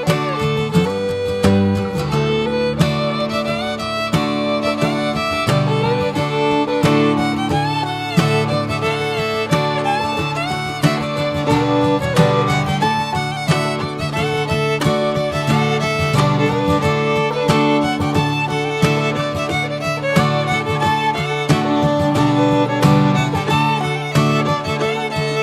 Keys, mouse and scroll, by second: 1.1-2.4 scroll up 1, 2.4 n, 5.3-5.9 drag, 5.9 n, 6.7 middle click, 7.0-7.4 scroll up 3, 7.4-9.3 shift+middle drag, 9.3 scroll down 2, 9.4-16.5 middle drag, 16.5-17.0 scroll down 3, 16.8-17.5 middle drag, 17.2-17.5 drag, 17.5-17.9 scroll down 2, 17.9-21.1 shift+middle drag, 21.4 scroll down 2, 21.9 alt+middle click, 23.0 g, 24.4 r.